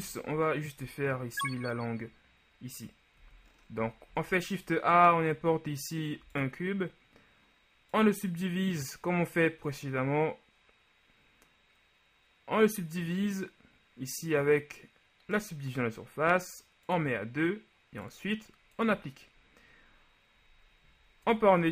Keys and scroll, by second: 0.0 shift+z, 3.4 z, 4.2 a, 21.4 Tab.